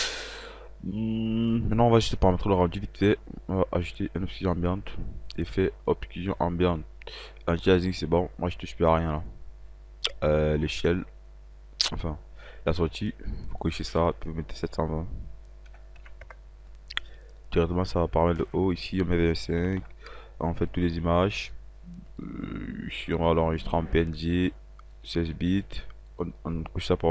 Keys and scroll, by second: 15.3 KP_7, 15.7 KP_2, 16.0 KP_0, 19.3 KP_2, 19.5 KP_5.